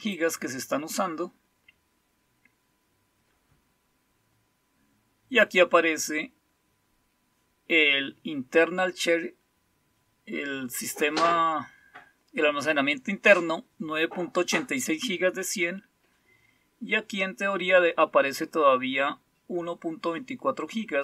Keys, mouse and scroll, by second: 0.0 click.